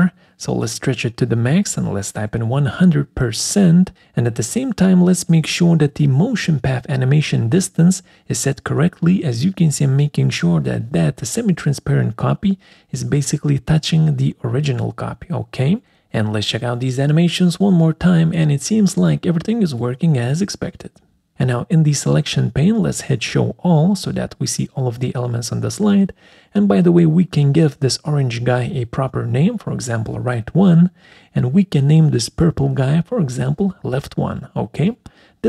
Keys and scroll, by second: 0.5-1.4 typing, 3.0 shift+5, 29.7-31.6 typing, 31.5 Left, 34.5 ctrl+a, 34.9-35.4 typing.